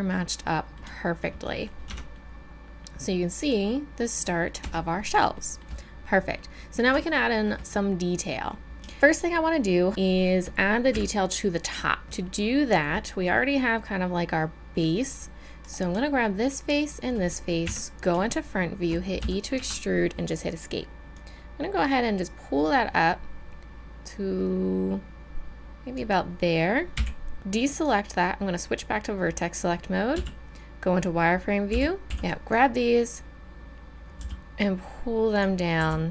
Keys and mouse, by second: 1.0 middle click, 1.9 Tab, 4.6 Tab, 10.9 KP_1, 17.6 KP_1, 19.2 e, 22.7-25.9 middle drag, 26.9 a, 27.7-29.7 middle drag, 30.1-31.7 middle drag, 30.1 z, 31.7 b, 31.7 middle click, 32.0 a, 34.2 g, 35.8 r.